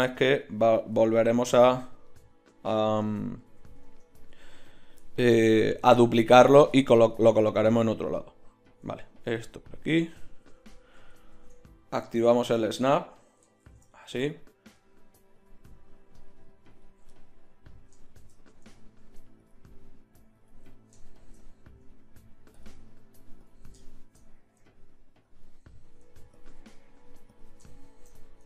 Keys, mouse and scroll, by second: 1.0 z, 2.8 z, 3.4 z, 3.8 Tab, 9.4-10.9 drag, 10.9 ctrl+z, 11.3 ctrl+Tab, 13.0 ctrl+Tab, 13.6 shift+Tab, 22.2 middle click, 25.1 middle click.